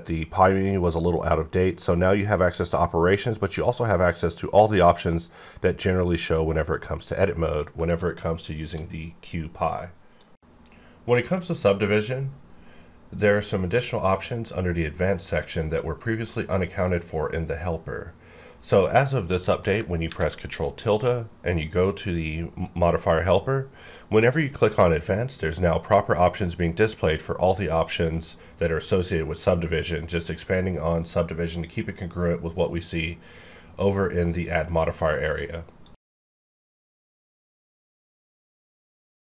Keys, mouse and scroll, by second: 8.6 right click, 19.3 middle click, 20.0 ctrl+`, 21.5 click, 24.2 click.